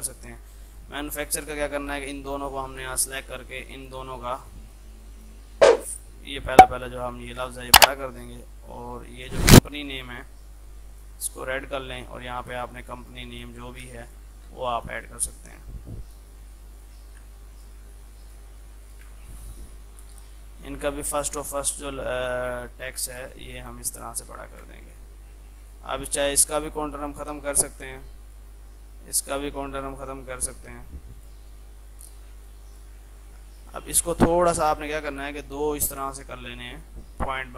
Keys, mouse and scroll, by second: 2.7-3.5 typing, 6.3-7.5 typing, 7.7 click, 9.5 ctrl+z, 11.0-13.7 drag, 14.0 c, 14.1 click, 15.1 Down, 15.6 click, 16.3 Down, 16.8 click, 17.3 shift+F2, 17.6 click, 19.2 c, 19.4-21.2 drag, 24.2 c, 24.6 shift+click, 24.7 c, 24.9 click, 27.9 right click, 28.3 click, 30.8 right click, 31.2 click, 33.1 ctrl+z, 34.1-37.5 drag.